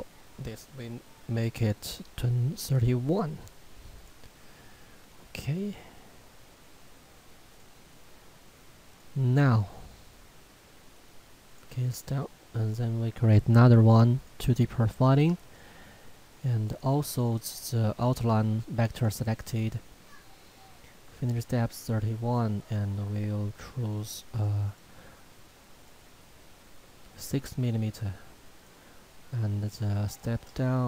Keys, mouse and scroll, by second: 2.7 click, 7.5 click, 14.2 click, 22.6 click.